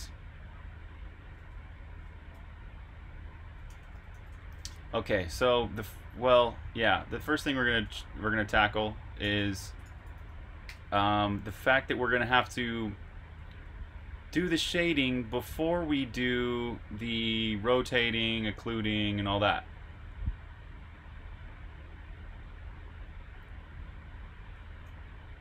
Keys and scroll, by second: 1.9 super+q, 3.4-5.1 typing, 7.1-11.9 typing, 13.0-17.2 typing.